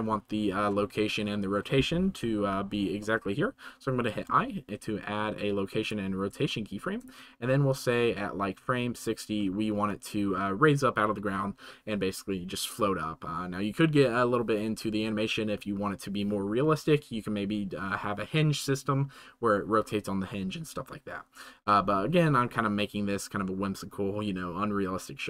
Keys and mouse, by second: 0.4 middle click, 4.2 i, 6.6 middle drag, 7.7-9.1 right drag.